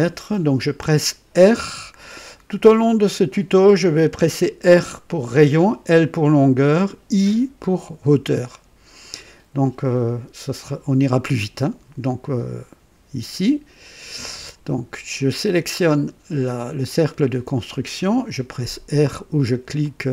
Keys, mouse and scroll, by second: 14.1 click, 16.8 click, 19.8 click.